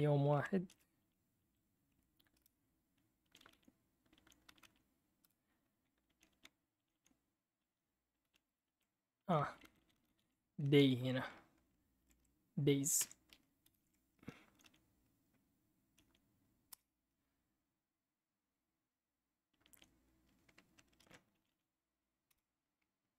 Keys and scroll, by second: 0.6 ctrl+c, 2.3 Up, 3.5 Up, 4.1 Down, 5.2 Return, 6.1 Down, 6.3 Down, 6.8 Down, 6.9 Down, 7.6 Right, 9.2 Up, 9.4 Left, 9.6 Left, 9.8 Left, 9.9 Left, 10.1 Left, 10.2 Left, 10.6 Right, 11.7-14.1 typing, 13.0 Escape, 15.9 Up, 16.7 Return, 20.9 Up, 20.9 ctrl+c, 22.3 Return.